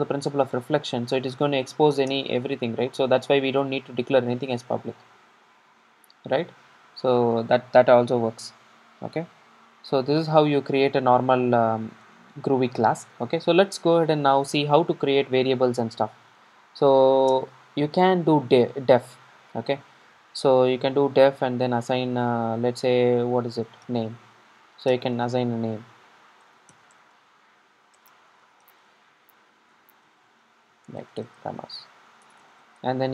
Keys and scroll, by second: 6.1 super+r, 13.0 super+a.